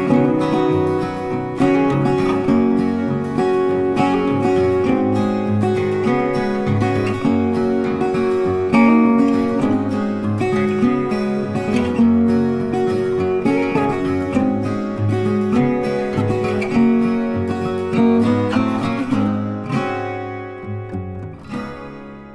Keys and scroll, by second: 2.1 Delete, 14.1 Delete, 16.0 ctrl+d.